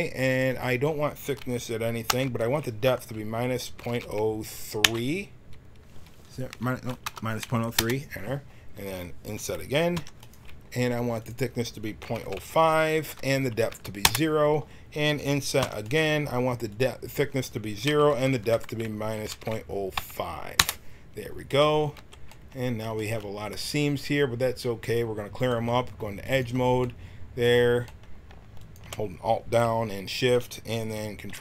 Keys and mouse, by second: 0.4-2.2 drag, 9.9 i, 11.2-13.1 drag, 16.6-18.8 drag, 21.9 t, 31.2 ctrl+e.